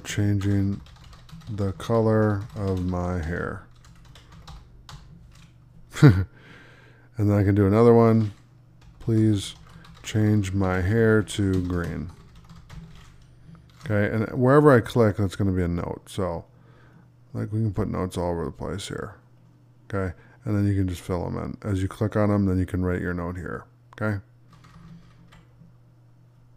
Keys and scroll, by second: 0.0 space, 1.2-3.1 typing, 9.6-11.7 typing.